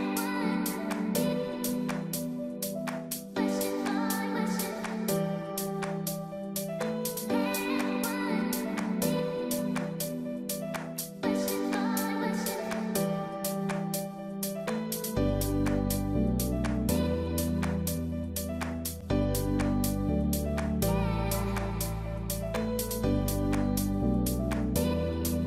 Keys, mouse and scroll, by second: 0.6 a, 1.1 click, 1.6 e, 3.2 middle click, 4.4-4.7 scroll down 1, 4.7 middle click, 5.4 click, 6.2 click, 6.7 click, 7.1 shift+click, 7.5 middle click, 8.6 click, 9.3 g, 13.7 middle click, 15.6 click, 16.3 alt+click, 16.8 middle click, 18.1 alt+shift+click, 18.3 middle click, 19.2 click, 19.5 click, 21.1 middle click, 23.4 middle click, 24.9 click, 25.2 click.